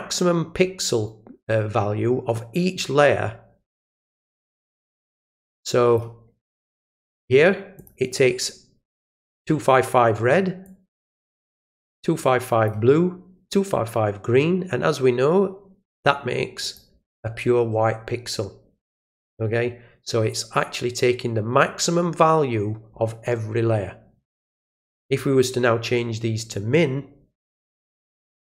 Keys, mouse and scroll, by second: 5.3 click, 7.7 click, 10.6-12.6 drag, 13.5-15.9 drag, 16.6 click, 20.3 click, 26.4 click, 27.6 click.